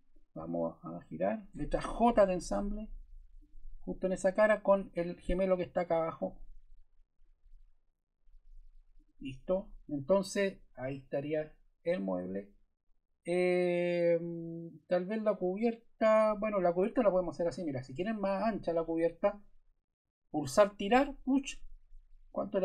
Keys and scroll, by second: 2.0 j.